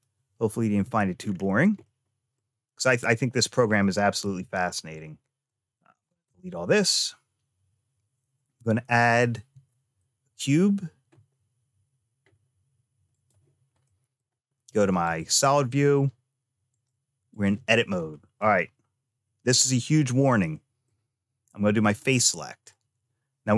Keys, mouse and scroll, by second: 0.7 Tab, 1.0-1.6 scroll down 2, 1.6 middle click, 1.6-2.2 scroll down 1, 3.6 middle click, 4.8 click, 6.1 x, 9.3 shift+a, 13.6 middle click, 14.9 click, 16.5 click, 17.8-19.3 scroll up 3, 19.3 scroll down 1, 20.4 middle click, 21.7 click, 22.5 click.